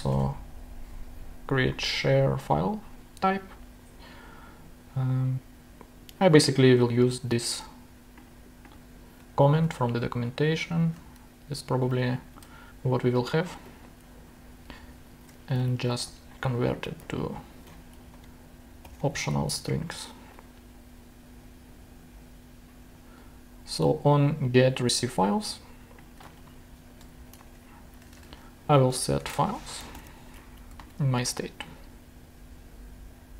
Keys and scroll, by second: 0.1 Return, 9.6 shift+super+c, 10.9 super+v, 12.3 alt+super+l, 14.5 ctrl+shift+Down, 15.3 ctrl+alt+shift+Down, 15.5 alt+Right, 16.5-17.5 typing, 18.0 alt+Left, 18.8 shift+/, 26.6 super+Left, 27.1 shift+super+Down, 27.4 shift+Return, 27.9 Tab, 28.4-30.6 typing, 30.8 super+Right, 31.4 super+;.